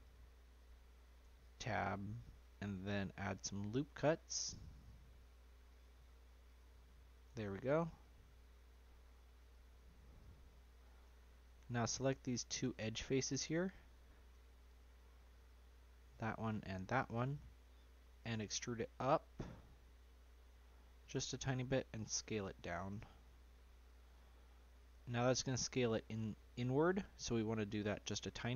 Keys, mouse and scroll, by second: 0.0 click, 0.5 click, 1.4 Tab, 3.4-11.0 drag, 11.0 Tab, 11.5 Tab, 13.8 3, 14.6 click, 16.4 shift+click, 18.2 e, 22.1 s, 25.1-27.2 middle drag, 27.2-28.3 scroll up 1.